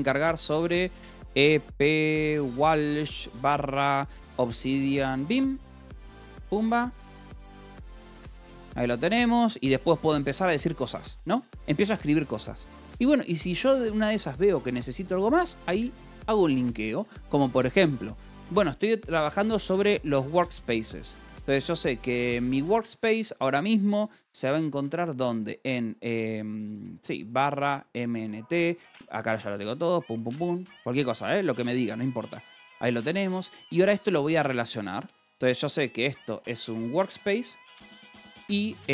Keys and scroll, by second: 0.6-3.2 typing, 6.3 Escape, 7.2-8.8 typing, 13.8 Escape, 19.3-22.0 typing, 23.1 space, 25.0 space, 25.3 /, 26.7-28.7 typing, 30.3 ctrl+g, 30.3 Escape, 31.1 ctrl+s, 31.3-33.3 typing, 34.4 Escape, 34.6-38.9 typing.